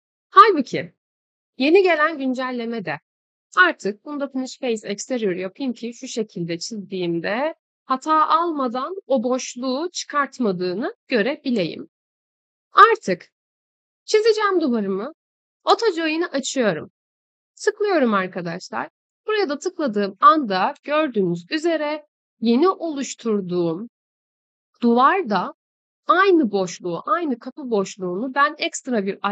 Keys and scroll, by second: 7.7 Escape, 12.1 Delete, 20.2 Escape.